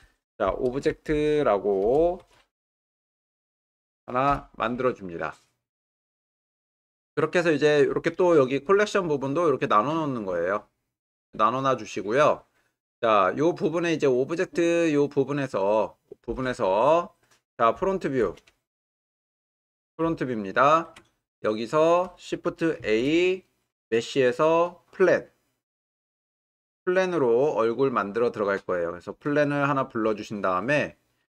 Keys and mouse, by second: 11.2 click, 17.0-18.2 middle drag, 18.7-19.3 shift+middle drag, 20.2-20.9 ctrl+middle drag, 21.3-21.9 shift+middle drag, 22.8 shift+a, 30.8-31.3 middle drag.